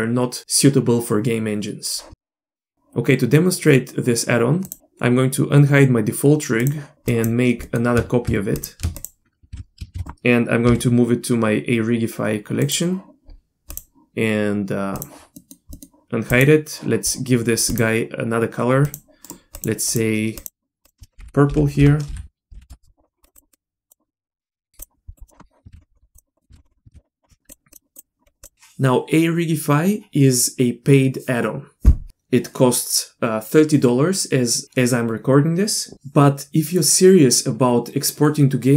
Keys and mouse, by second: 6.7 click, 7.1 click, 7.6 middle click, 8.6 click, 9.5 shift+f, 10.0 shift+d, 10.7 m, 13.7 click, 15.0 click, 15.4 middle click, 16.4 click, 17.7 drag, 18.8 click, 19.6 drag, 19.9 click, 20.8-22.8 drag, 21.2 BackSpace, 21.7 BackSpace, 23.2 click, 23.3 click, 24.5 ctrl+c, 24.7 ctrl+v, 24.8 drag, 25.7 ctrl+c, 26.1 click, 26.5 ctrl+c, 26.9 ctrl+v, 27.5 drag, 27.7 click, 28.0 drag, 28.4 click.